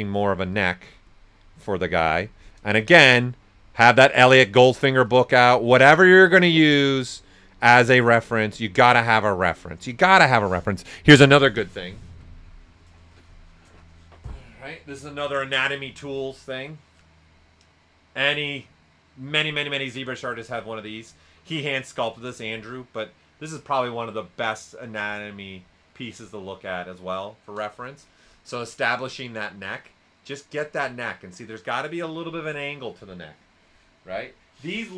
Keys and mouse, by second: 2.0 right click, 3.1 click, 4.4 right click, 5.0 click, 8.7 right click, 9.6 click.